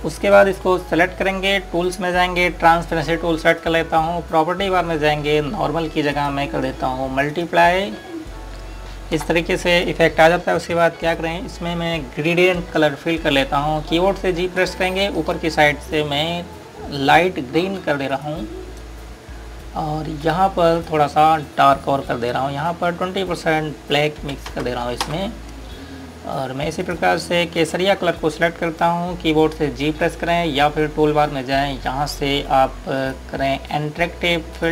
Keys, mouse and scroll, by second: 4.2 click, 8.8 Up, 10.7 click, 15.4 g, 15.8 click, 18.9 click, 25.1 KP_2, 25.4 KP_0, 26.0 KP_Enter, 27.8 click, 34.0 click.